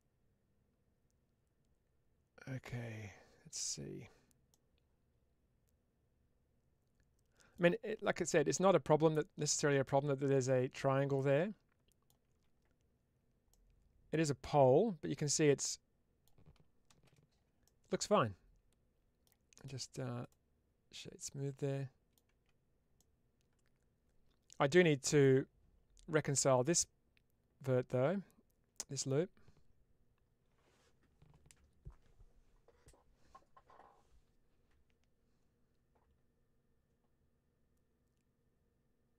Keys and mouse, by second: 4.5-7.4 middle drag, 9.3 middle click, 10.4-11.9 middle drag, 13.4-16.1 middle drag, 16.7 shift+space, 17.5-19.1 middle drag, 19.9 right click, 20.8-22.0 middle drag, 22.3 Tab, 22.8-25.1 middle drag, 27.7-28.9 middle drag.